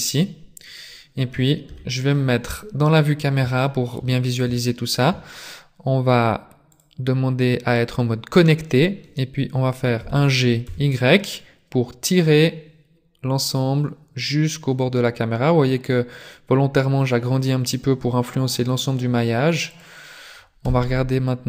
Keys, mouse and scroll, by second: 0.0 middle click, 0.8-1.3 scroll down 3, 1.6 KP_0, 3.0-3.4 scroll up 1, 3.6 shift+middle click, 4.6 shift+middle click, 6.8 click, 10.1 g, 20.6 z.